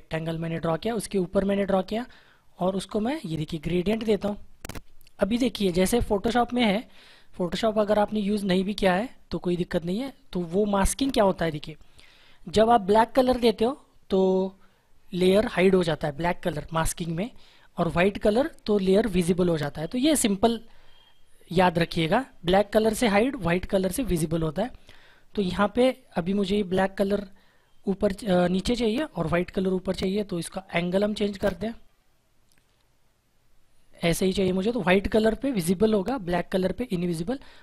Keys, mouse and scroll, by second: 30.9 click.